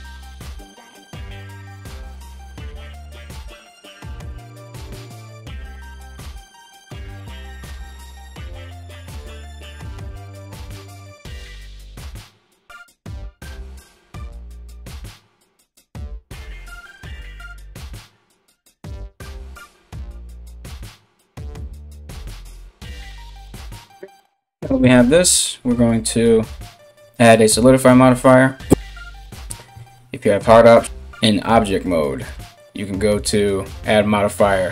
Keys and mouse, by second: 3.5 alt+right click, 3.9 alt+right click, 4.3 3, 4.5 right click, 4.9 right click, 5.1 ctrl+right click, 5.3 ctrl+right click, 5.6 x, 6.6 2, 6.7 right click, 7.1 e, 8.6 e, 9.1 e, 9.9 ctrl+z, 10.1 ctrl+z, 11.5-13.3 typing, 12.4 alt+right click, 13.7 ctrl+b, 14.6 e, 22.9 a, 29.3 q, 30.8 Tab.